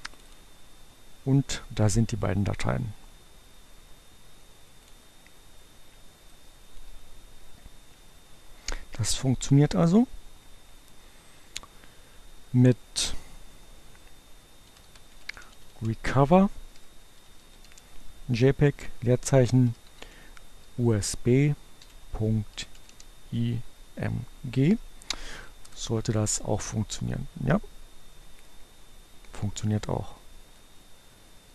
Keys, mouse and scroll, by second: 4.7-7.3 drag, 13.2 r, 14.6-20.7 typing, 22.3-23.3 typing, 29.6-30.9 drag.